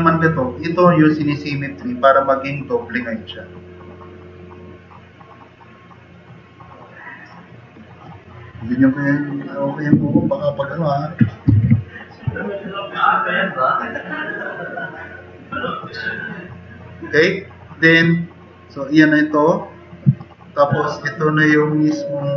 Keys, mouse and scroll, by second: 11.7 super+-, 12.4 drag, 13.6-14.0 drag, 16.1 click, 16.5 click, 20.1-20.9 drag.